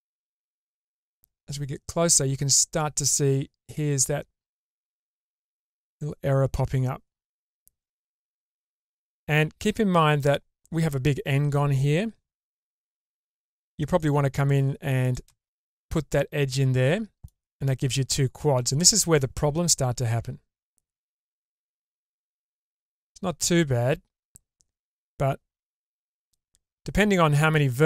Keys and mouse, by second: 3.7-5.3 middle drag, 7.3-7.7 drag, 7.7-8.8 middle drag, 9.3 Tab, 12.7 k, 16.1-17.2 middle drag, 20.1 Tab, 21.3-24.9 middle drag, 26.3 middle click, 27.1 Tab.